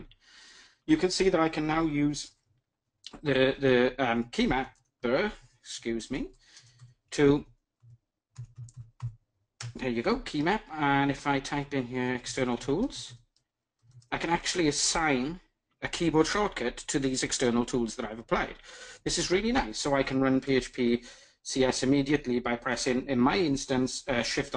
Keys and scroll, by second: 5.2 ctrl+shift+super+a.